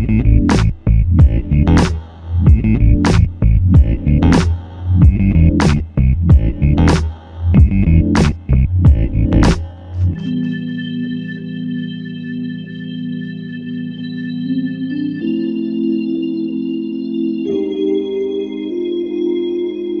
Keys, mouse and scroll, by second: 2.9 ctrl+alt+click, 5.9 ctrl+alt+click, 8.8 double click.